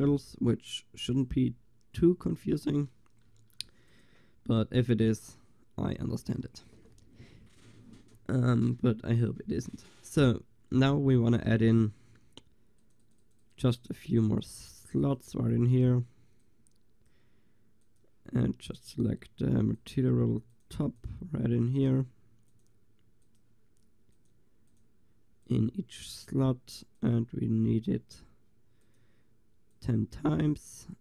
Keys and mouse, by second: 3.0 middle click, 3.6 ctrl+s, 12.8-29.7 drag.